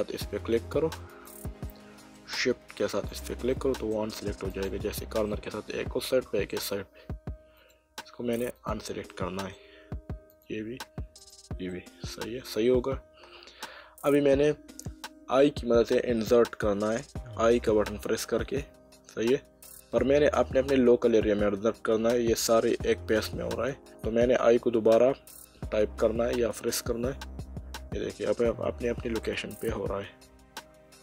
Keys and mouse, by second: 1.1 click, 1.7 middle click, 2.9 shift+click, 3.5 middle click, 4.5 shift+click, 5.3 middle click, 7.6 shift+click, 9.1 middle click, 10.3 shift+click, 11.7 middle click.